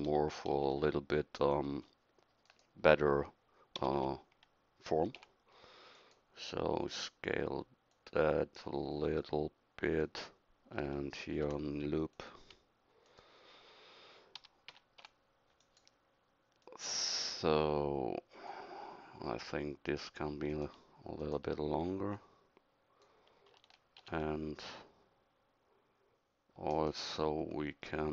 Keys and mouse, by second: 0.5 ctrl+r, 3.8 s, 9.1 s, 11.3 ctrl+r, 14.4 s, 19.9-22.2 middle drag, 24.0 ctrl+r.